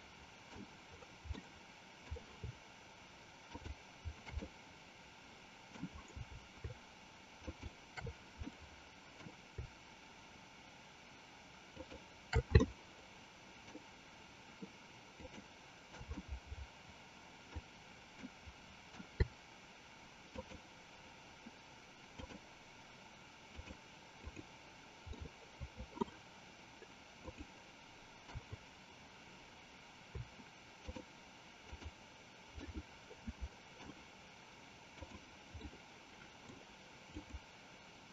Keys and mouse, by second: 1.6 middle click, 3.4 shift+click, 4.6-5.9 middle drag, 7.4 shift+click, 8.7 middle click, 12.7-13.8 shift+middle drag, 15.1 shift+click, 16.3-17.8 middle drag, 18.3 middle click, 20.2 shift+click, 22.1 shift+click, 23.4 shift+click, 24.4 shift+click, 25.3 shift+middle click, 27.2 shift+click, 31.8 shift+click, 32.8-34.1 shift+middle drag, 35.1 shift+click, 35.8-36.8 shift+middle drag, 37.3 shift+click.